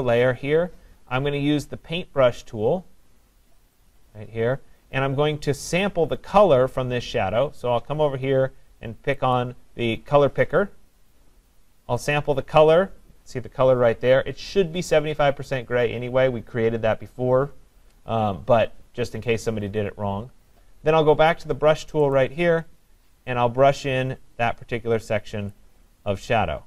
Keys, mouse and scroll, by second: 0.1-9.0 drag, 9.4-17.2 drag, 22.1-26.6 drag.